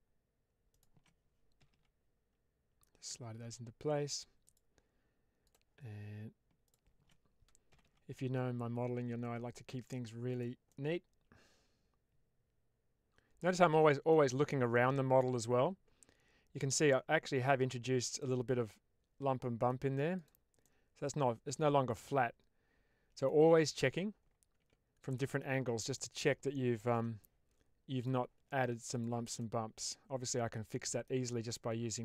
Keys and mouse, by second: 1.5 g, 1.6 g, 4.3 click, 6.5 shift+click, 7.6 g, 7.7 g, 10.6-14.0 middle drag, 14.6-17.3 middle drag, 18.1-19.6 middle drag, 20.6-23.1 middle drag, 23.5 Tab, 24.4 Tab, 25.0 middle click, 25.9 middle click, 26.8 3, 28.8 ctrl+shift+click, 29.3-30.9 middle drag.